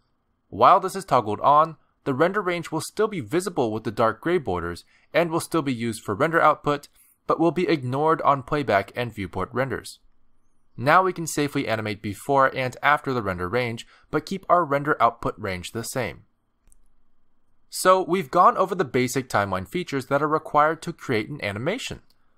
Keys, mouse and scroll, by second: 0.9 click, 5.0 click, 10.1 space.